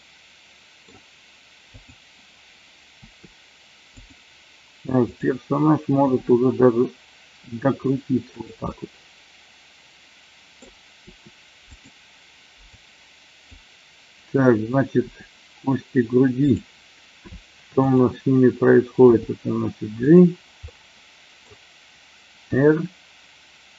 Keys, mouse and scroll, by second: 1.7-2.2 drag, 2.9 r, 3.9 click, 6.0 r, 8.3 click, 8.6-10.5 middle drag, 11.0 r, 12.6-13.5 drag, 15.0 r, 17.6 shift+click, 18.9 g, 19.9 click, 20.6 middle click, 22.5 r.